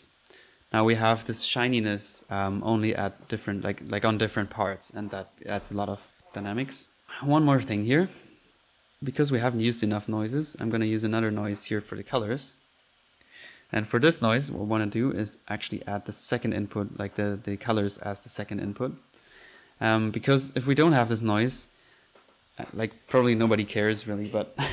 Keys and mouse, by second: 6.4 Escape, 8.1 click, 9.0-9.3 drag, 9.5-9.9 drag, 10.0 drag, 10.4 drag, 11.0 right drag, 11.4 click, 11.9-12.2 typing, 13.2-13.5 drag, 13.5-14.3 typing, 13.6-14.0 drag, 14.1 middle click, 15.4-16.7 drag, 18.2 click, 18.4 click, 20.9 click, 21.4 F1.